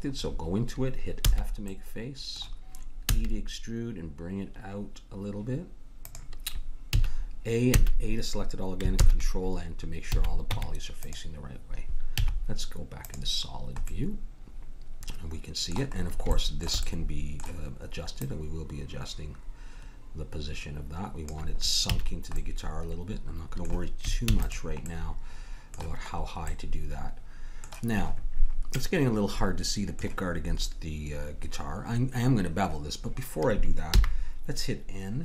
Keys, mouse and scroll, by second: 0.1-1.5 middle drag, 1.2 f, 3.1 e, 6.9 a, 7.8 a, 8.9 ctrl+n, 10.0 a, 10.5 Tab, 12.1 z, 15.9 middle click, 18.1-19.9 drag, 21.9 a, 22.1 middle click, 24.2 ctrl+s, 33.9 n.